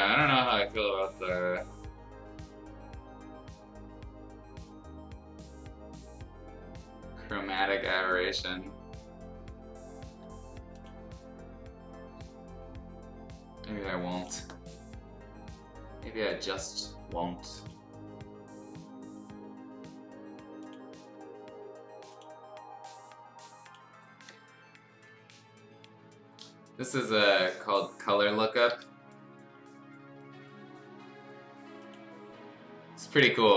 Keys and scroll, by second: 20.7 [.